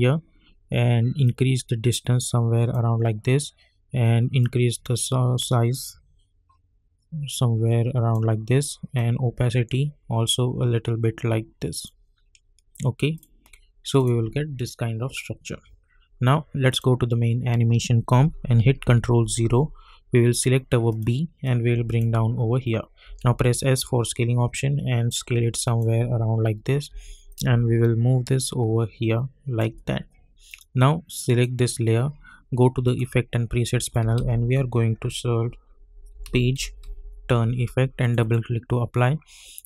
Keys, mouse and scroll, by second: 1.2-12.4 drag, 12.4-13.1 scroll up 1, 13.1 click, 16.7 click, 20.4-23.0 drag, 21.7-23.0 drag, 23.0 s, 24.1-26.9 drag, 26.9 v, 27.6-29.2 shift+drag, 34.1 ctrl+a, 35.9-37.3 typing, 38.0-39.6 drag.